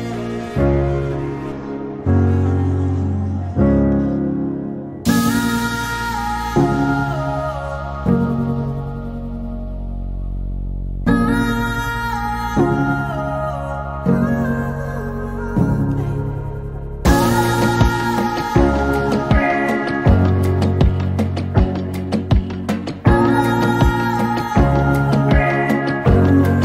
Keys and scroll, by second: 0.9-1.9 typing, 3.0 space, 6.1 t, 12.7-14.5 typing, 15.8-17.9 typing, 21.6 typing, 22.7-24.4 typing, 25.6 typing.